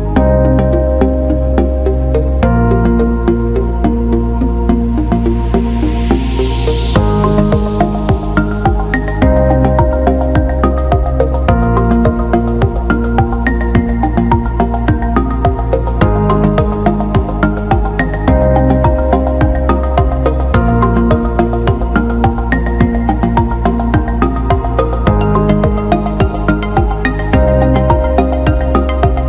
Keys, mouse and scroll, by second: 0.3 click, 0.9 alt+click, 2.2 alt+middle click, 4.3 alt+right click, 4.5 alt+middle click, 4.9 alt+middle click, 6.8 ctrl+5, 7.7 click, 9.0 alt+shift+middle drag, 9.3-10.0 alt+middle drag, 10.1 alt+middle drag, 11.2 alt+shift+middle drag, 11.9 ctrl+alt+middle drag, 12.2 alt+middle drag, 13.0-14.8 drag, 14.9 alt+middle click, 15.4 alt+middle click, 15.8 alt+shift+middle click, 20.1 Tab, 23.4 shift+click, 26.5 shift+d, 27.4 alt+middle click, 28.2 click.